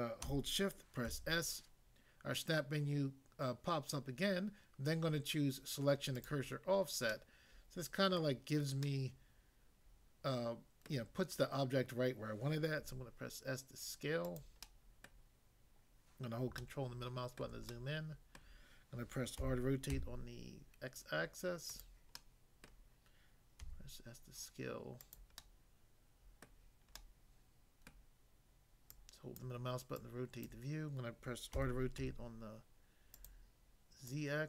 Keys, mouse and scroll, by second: 1.0 s, 6.1 click, 7.0 middle click, 8.2 middle click, 8.8 middle click, 12.8 s, 14.2 click, 14.6 middle click, 15.0 middle click, 16.6 ctrl+middle click, 17.7 shift+middle click, 19.4 r, 20.0 x, 21.7 click, 22.2 middle click, 22.7 middle click, 23.6 s, 25.0 click, 25.4 middle click, 26.4 middle click, 27.0 middle click, 27.9 middle click, 28.9 click, 29.4 click, 29.9 click, 30.5 click, 31.5-32.0 typing, 33.2 click, 34.0 click.